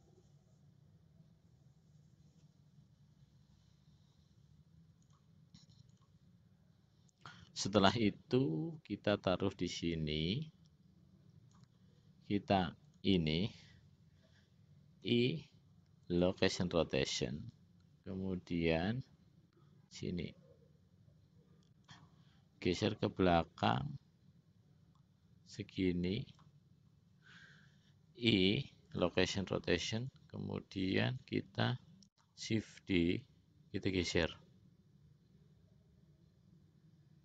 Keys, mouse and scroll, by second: 5.2 click, 6.1 click, 8.0-12.0 drag, 13.1 click, 15.2 i, 17.9-22.3 drag, 24.0-26.8 drag, 28.4 i, 30.2-31.5 drag, 33.1 shift+d.